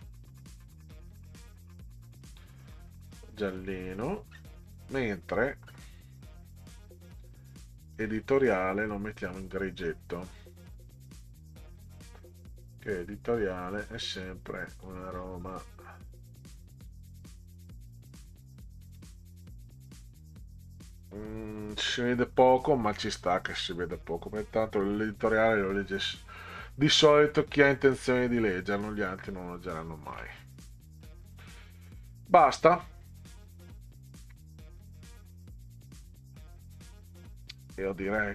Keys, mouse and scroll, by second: 0.3 scroll up 2, 1.0-1.3 scroll down 4, 2.2 click, 3.3 click, 4.3-5.8 scroll down 8, 7.9 click, 8.2 click, 9.5-11.8 drag, 13.5 click, 14.7 click, 15.4-15.9 scroll down 6, 16.8 click, 18.8 click, 22.2 scroll down 2, 24.0 middle click, 24.1 middle click, 26.5 scroll up 2, 28.0 scroll down 2, 31.0 scroll down 2, 32.8 scroll up 2, 33.7 ctrl+scroll down 2, 37.5-38.3 scroll down 26.